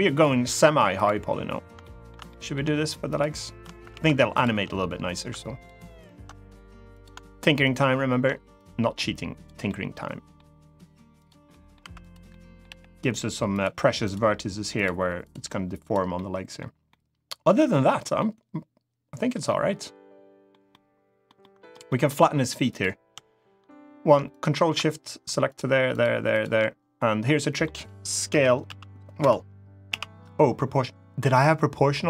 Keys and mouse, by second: 0.7 click, 1.5 shift+middle click, 2.0 middle click, 2.9 shift+click, 3.7 ctrl+z, 4.1 shift+click, 7.4 ctrl+click, 8.3 click, 9.4 middle click, 10.9 click, 11.2 middle click, 11.8 click, 11.8 1, 12.1 middle click, 12.4 g, 13.2 click, 13.9 g, 14.5 click, 15.1 g, 15.5 click, 15.9 middle click, 16.6 middle click, 17.4 middle click, 17.9-19.0 middle drag, 19.2 middle click, 20.4 middle click, 21.1 middle click, 21.6 middle click, 21.9 3, 22.4 click, 24.0 ctrl+shift+click, 25.2 shift+click, 25.6 shift+click, 26.0 shift+click, 26.3 middle click, 27.2 middle click, 28.0 s, 28.4 z, 28.9 Escape, 29.6 o, 31.7 middle click.